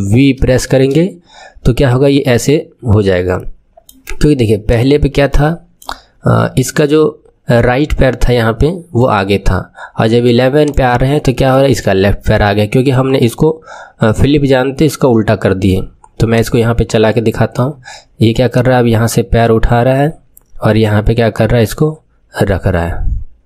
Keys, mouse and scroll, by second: 0.3 ctrl+shift+v, 3.2-4.7 middle drag, 4.7 click, 5.2-7.5 middle drag, 7.5-8.5 scroll down 1, 8.5-10.6 middle drag, 10.6-11.5 drag, 11.5-14.5 middle drag, 14.5-17.1 drag, 17.1-18.4 middle drag, 18.5-21.5 drag.